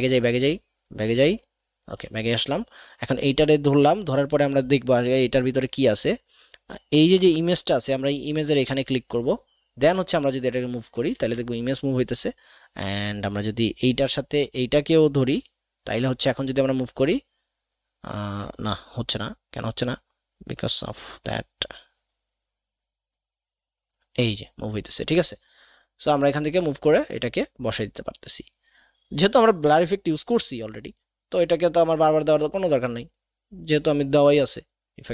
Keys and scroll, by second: 11.1 ctrl+z.